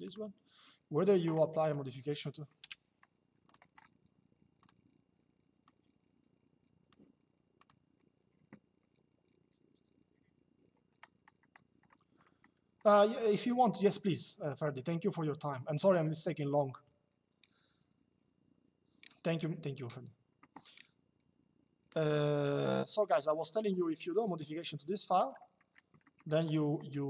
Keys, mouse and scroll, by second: 1.9 middle click, 2.0-2.8 typing, 3.2 click, 4.3 click, 5.4 click, 7.3 click, 24.1 middle click.